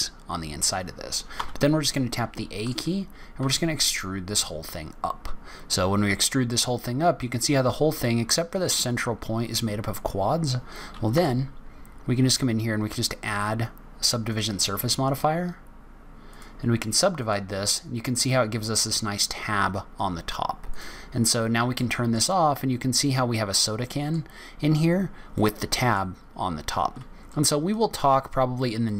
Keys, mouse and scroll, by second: 1.2 a, 2.0 middle click, 3.3 e, 8.9-9.3 scroll down 3, 9.3-10.0 scroll up 2, 11.0 Tab, 12.8 click, 16.2 click, 17.6 scroll down 3, 18.0 scroll up 1, 18.5-19.0 scroll down 4, 19.4-20.2 scroll up 1, 20.6 click, 21.2-21.7 scroll down 2, 21.7 middle click, 22.3-22.8 scroll down 2, 22.8-23.7 scroll up 2, 23.7 middle click, 24.8-25.4 scroll up 2, 25.2 middle click, 26.0-26.4 scroll up 2, 26.7 scroll up 2, 27.2 middle click, 28.5-28.9 scroll down 4.